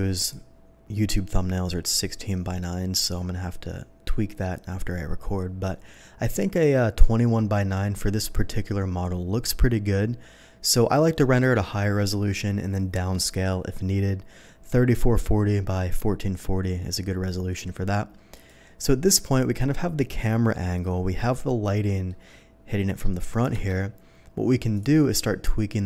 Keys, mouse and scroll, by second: 0.2 click, 3.2 middle click, 7.4 scroll up 1, 18.3 click, 21.2-22.0 middle drag, 23.9 KP_0, 24.7 click.